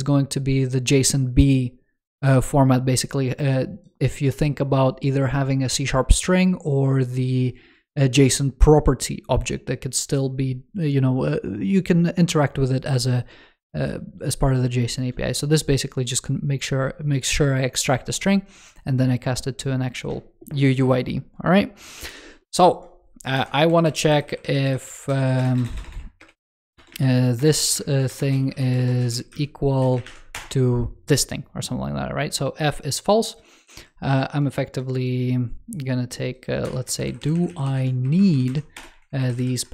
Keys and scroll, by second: 24.0 alt+Left, 36.8 alt+Left, 38.9 alt+Left, 39.6 alt+Right.